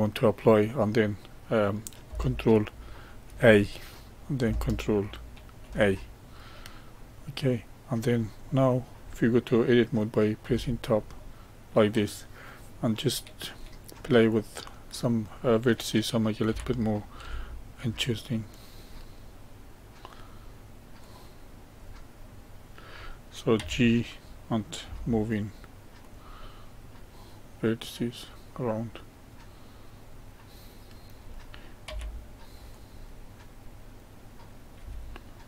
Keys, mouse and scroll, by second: 3.2 ctrl+a, 5.6 ctrl+a, 6.4-10.4 middle drag, 10.4 Tab, 11.1-14.2 middle drag, 14.2 click, 16.4 g, 18.9-21.0 middle drag, 21.0 click, 22.1-23.5 middle drag, 23.5 g, 26.3-28.7 middle drag, 30.9 click, 31.8 g, 33.1-34.3 middle drag, 34.3 click, 34.7 g.